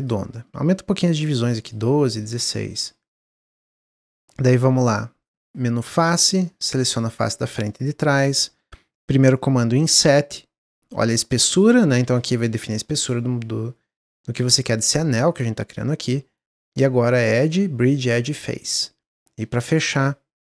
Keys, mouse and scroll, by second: 1.0 click, 1.9 middle click, 2.2-2.7 scroll up 1, 2.7-5.3 middle drag, 5.3 click, 6.0 click, 6.3 middle click, 7.3 shift+click, 7.6-9.5 middle drag, 9.5 i, 17.2-18.8 drag, 18.8 Tab, 19.9 drag.